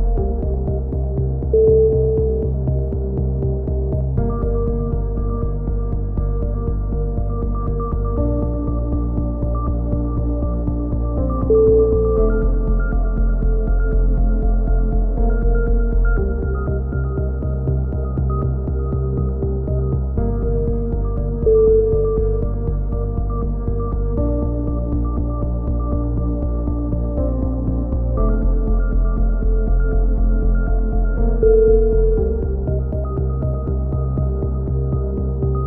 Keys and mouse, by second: 0.3 ctrl+KP_1, 1.0 Tab, 1.4 middle click, 1.8 ctrl+l, 2.3 e, 2.8 click, 3.5 a, 3.7 z, 3.8 z, 4.2 Tab, 4.6 click, 6.5 Tab, 6.6 click, 7.0 click, 7.0-9.7 typing, 9.7 click, 11.6-13.5 drag, 13.8 z, 14.0-14.8 drag, 15.4-16.5 drag, 16.5 right click, 16.5 KP_7, 16.9 z, 17.1 click, 17.6 ctrl+z, 20.0 a, 20.2 z, 21.3 z, 22.0 z, 22.4 ctrl+r, 22.9 z, 25.6 a, 26.2 z, 28.5-29.1 right drag, 28.6 ctrl+l, 28.8 ctrl+n, 29.1 a, 29.9 Tab, 34.9-35.2 middle drag.